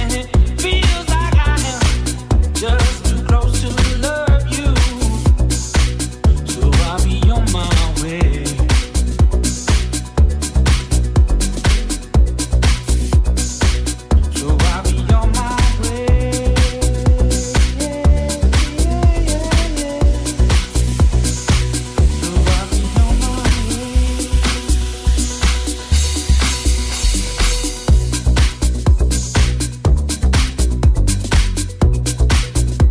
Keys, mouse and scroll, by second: 6.9 click, 6.9 c, 8.0-23.3 shift+drag, 9.8 c, 27.8-32.9 shift+drag, 29.4 c.